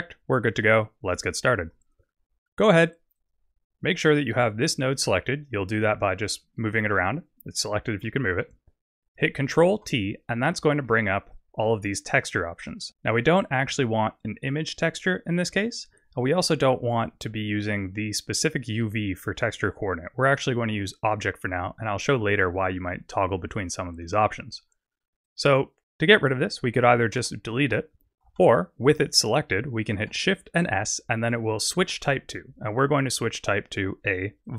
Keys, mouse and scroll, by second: 3.1 click, 4.0 click, 4.5 click, 8.1 middle click, 9.0 click, 9.8 ctrl+t, 10.5 middle click, 11.4 click, 12.6 middle click, 20.4 click, 25.2 click, 27.2 x, 28.5 ctrl+z, 28.9 click, 30.6 shift+s.